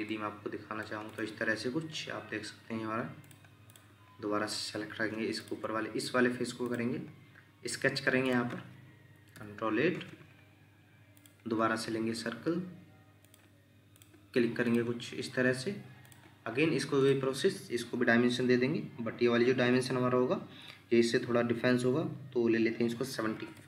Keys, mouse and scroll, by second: 0.1 middle click, 1.9-2.3 scroll up 1, 2.3-2.7 scroll down 1, 3.7 double click, 9.3 ctrl+8, 23.3-23.6 typing.